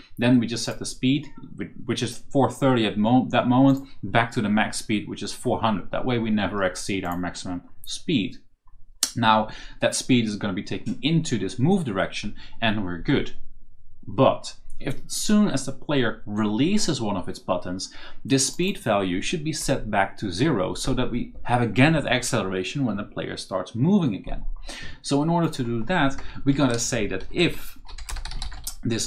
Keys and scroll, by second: 26.1 Return, 26.3 Up, 27.6-28.9 typing.